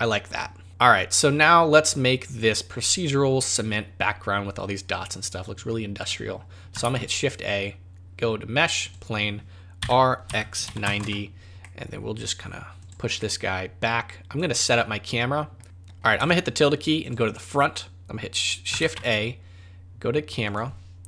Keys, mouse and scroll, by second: 6.8 shift+a, 9.8 r, 11.6 middle click, 12.8 click, 13.2 middle click, 13.8 click, 14.6 middle click, 15.6 `, 16.1 `, 18.8 shift+a.